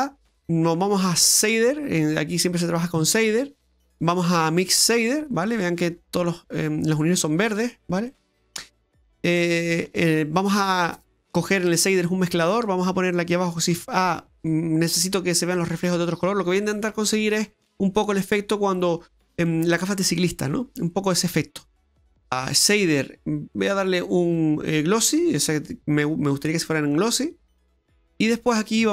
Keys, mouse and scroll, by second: 6.1-7.2 scroll up 6, 8.1 middle click, 9.2 middle click, 13.7 shift+a, 26.9 click, 27.9 middle click.